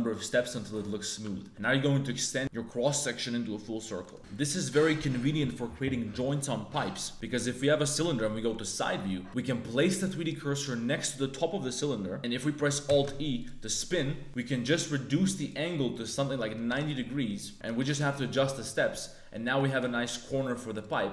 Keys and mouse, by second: 0.5 middle click, 1.2 Tab, 1.4 click, 4.0 click, 4.1 Tab, 4.1 3, 4.1 g, 7.1 Tab, 7.3 3, 7.5 click, 8.3 KP_3, 9.2 shift+s, 9.9 click, 12.8 alt+e, 14.3-15.5 drag, 15.9 click, 17.5 click, 19.0 middle click, 19.7 e.